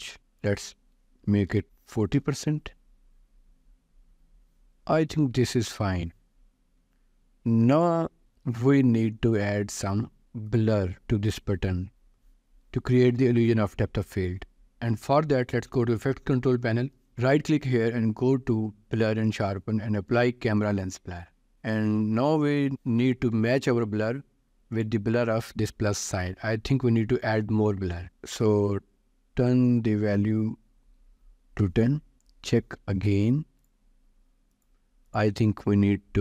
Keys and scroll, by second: 0.2 ctrl+s, 1.0-2.5 typing, 8.6 ctrl+s, 28.4 0, 31.6 Return.